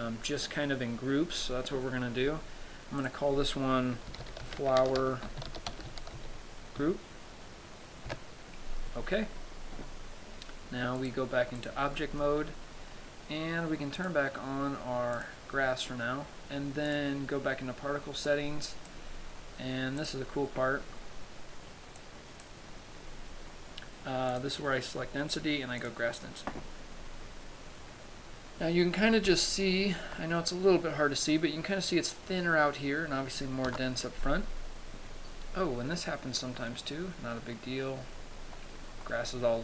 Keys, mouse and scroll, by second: 3.2 click, 11.2 click, 12.4 middle click, 14.2 click, 15.6 click, 17.3 click, 18.8 click, 20.4 click, 22.5 click, 24.8 click, 27.4-28.9 scroll down 2, 29.1-29.5 scroll up 1, 29.9 shift+middle click, 31.1 scroll up 1, 34.1 KP_0, 35.1-35.5 scroll up 1, 36.5-38.2 scroll up 5, 38.2-39.6 scroll up 5.